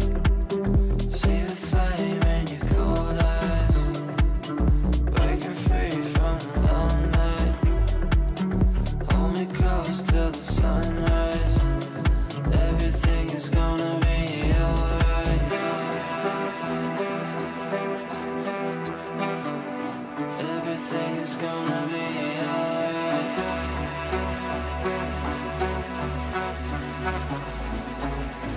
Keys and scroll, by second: 3.9 g, 15.0 g, 24.9 g.